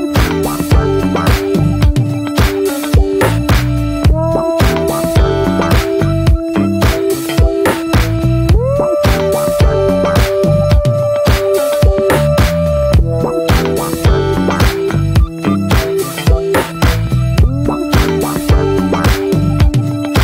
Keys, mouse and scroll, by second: 0.5 click, 0.9-1.4 middle drag, 1.4 alt+z, 1.7-3.6 middle drag, 3.6 click, 4.9 click, 5.4 click, 6.2 click, 6.5 click, 7.1 shift+middle click, 7.2 scroll up 1, 7.5 middle click, 8.4-9.6 drag, 9.6-13.2 shift+middle drag, 13.2-16.4 drag, 18.1-20.2 drag.